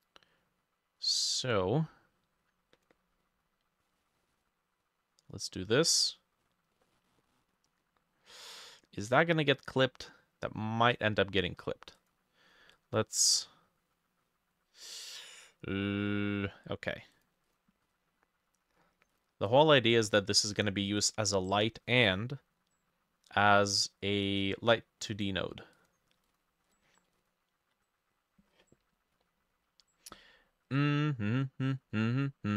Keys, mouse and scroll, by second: 6.9 middle click, 17.5-19.5 drag, 20.9-22.9 drag, 26.7-29.2 drag.